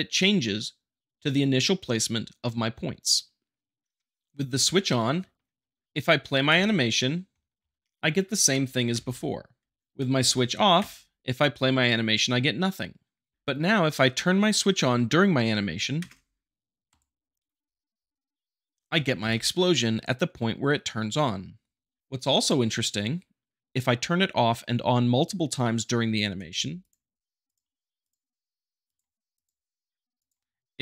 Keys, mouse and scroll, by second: 5.4 middle click, 6.0-8.1 shift+middle drag, 6.5 space, 8.7 shift+Up, 8.9 shift+Left, 9.8 click, 10.1 shift+Left, 10.7 space, 13.3 shift+Left, 16.8-17.9 drag, 18.7 space, 19.2 shift+Left, 22.4-23.4 drag, 26.4 space, 26.8-27.8 drag, 28.0-29.0 drag, 29.3-30.4 drag.